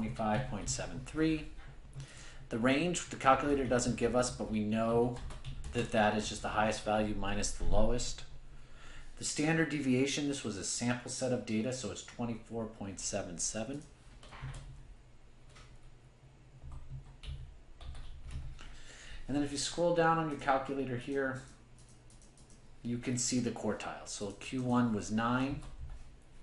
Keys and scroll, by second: 21.1 Right, 21.1 Down.